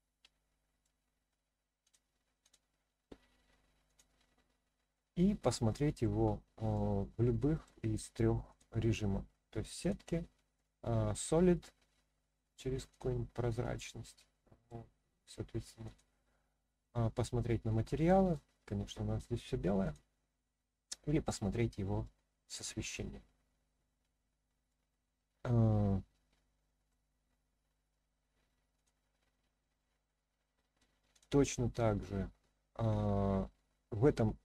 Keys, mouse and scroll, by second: 1.8-2.5 drag, 3.9 click, 4.9-6.0 middle drag, 6.3-6.7 scroll down 1, 6.7-7.6 middle drag, 8.5 click, 9.8 click, 10.5-11.6 middle drag, 12.9 click, 13.7 scroll up 1, 13.7-14.7 middle drag, 15.9 click, 16.8-18.3 middle drag, 19.8 click, 20.8-21.5 middle drag, 22.0 scroll up 1, 22.0 middle click, 23.1 scroll down 1, 23.8 scroll down 2, 24.1-24.7 scroll up 2, 24.7-26.9 middle drag, 27.2-27.7 scroll up 1, 27.9-28.7 scroll down 1, 28.7 click, 29.8-30.8 middle drag, 31.1 click.